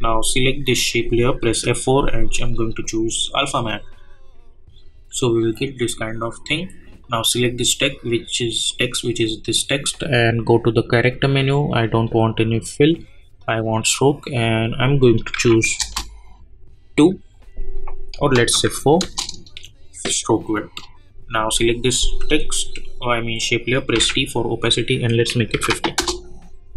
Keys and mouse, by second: 0.6 click, 1.4 F4, 2.3 click, 7.0 click, 15.8 Return, 18.1 click, 19.0 Return, 21.4 click, 24.4 t, 25.0 click, 25.9 Return.